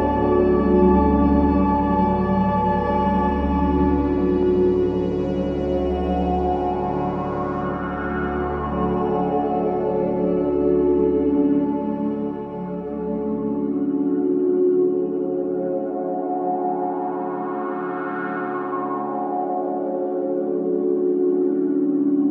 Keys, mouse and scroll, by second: 0.1 click, 3.8 click, 6.6-10.9 drag, 12.9 click, 13.9 alt+click, 14.4 alt+right click, 14.8 alt+click, 15.1 alt+right click, 15.5 alt+middle click, 15.9 alt+click, 16.2 alt+right click, 16.6 alt+middle click, 17.5 alt+right click, 17.8 alt+click, 18.4 alt+right click, 18.7 alt+middle click, 19.1 alt+right click, 19.5 alt+click, 19.8 alt+middle click, 20.1 alt+right click, 20.4 alt+click, 21.8-22.3 drag.